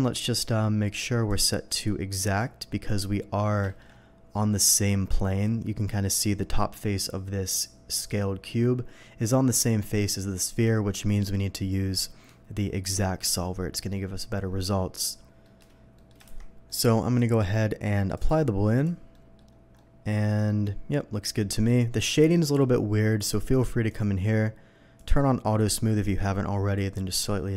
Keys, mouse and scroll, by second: 1.3 click, 2.2 click, 2.9 click, 3.4 scroll up 1, 3.7 shift+middle click, 3.9 shift+scroll up 1, 11.0 click, 13.2 click, 13.9 middle click, 15.4 middle click, 15.9 middle drag, 16.2 shift+2, 16.7 middle drag, 18.1 click, 18.7 click, 19.1 middle drag, 19.7-21.7 middle drag, 22.3 middle click, 23.2 click, 23.9 click, 25.0 click, 26.7-27.5 drag.